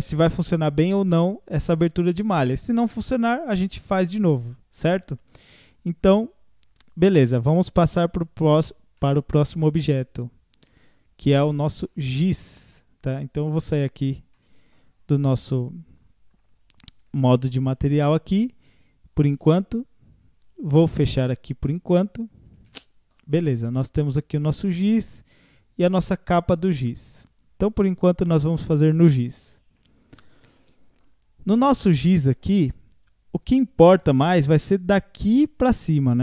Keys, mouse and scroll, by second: 8.5 scroll down 1, 9.0-10.6 middle drag, 10.6 click, 11.6 scroll up 4, 11.8-13.7 middle drag, 13.7-14.3 drag, 14.3 scroll up 1, 14.4-16.0 middle drag, 16.0-17.2 drag, 17.2-17.9 shift+middle drag, 17.9-22.2 drag, 22.2 scroll down 1, 24.3-27.9 drag, 27.9 scroll up 2, 28.3-29.2 middle drag, 29.2 click, 29.8 Tab, 30.1-30.5 scroll down 4, 30.5 middle click, 31.3 scroll up 1, 32.0 scroll up 1, 32.1-35.1 middle drag.